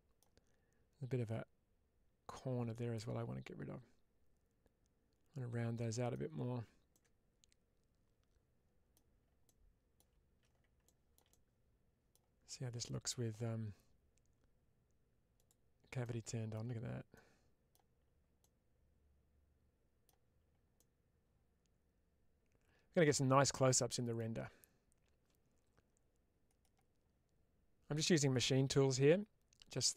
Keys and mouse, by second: 2.2-6.0 middle drag, 6.8-8.8 middle drag, 9.3-9.8 middle drag, 10.7-11.1 shift+middle drag, 11.2-12.0 middle drag, 15.9-16.4 middle drag, 17.0-17.6 middle drag, 18.3-19.9 middle drag, 20.6-24.0 middle drag.